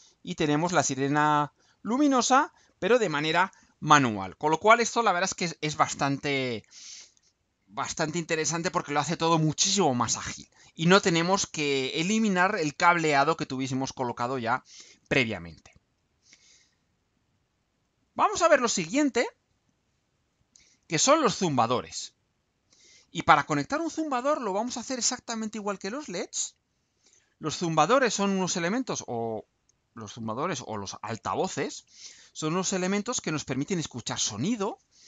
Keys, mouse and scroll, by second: 16.0 click, 17.4 click, 18.4-19.2 scroll down 1, 19.4-20.0 scroll down 4, 20.4-21.8 scroll down 8, 21.8-23.0 middle drag, 23.0 scroll down 2.